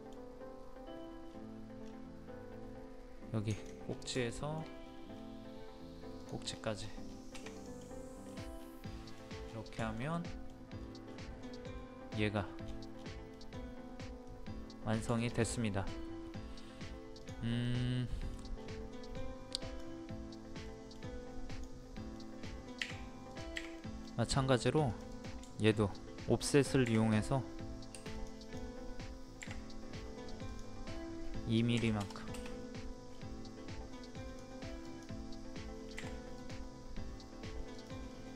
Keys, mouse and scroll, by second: 0.9 scroll up 1, 1.8-3.5 scroll down 2, 3.5 ctrl+click, 3.8 scroll down 1, 4.3 shift+middle click, 4.7 scroll up 1, 6.2 click, 6.5 scroll down 1, 7.5 click, 7.8 middle click, 8.1 scroll down 1, 8.3 scroll up 1, 8.5 scroll down 1, 8.8 scroll up 1, 8.8 scroll down 1, 9.8 shift+middle click, 10.7-11.0 scroll up 1, 11.4-12.3 scroll up 1, 12.3-12.6 scroll down 1, 13.3 middle click, 15.1 shift+middle click, 16.5-17.2 scroll up 1, 17.2 click, 17.6 middle click, 18.5 scroll up 1, 19.1-19.6 scroll down 1, 19.6 click, 20.6 middle click, 21.4 click, 22.1 middle click, 23.3 click, 23.7 middle click, 24.2 scroll up 1, 24.8 click, 25.4 shift+middle click, 25.8 scroll up 1, 26.8 typing, 28.1 click, 31.7 KP_2, 32.7 scroll up 1, 34.1 click, 35.9 p, 36.3 click, 38.1 middle click.